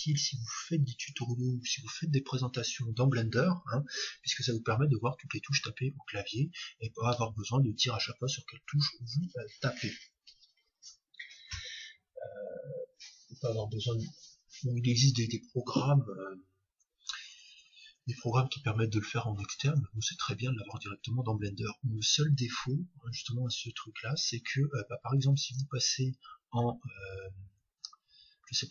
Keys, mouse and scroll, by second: 0.0-1.2 drag, 25.5-27.5 drag.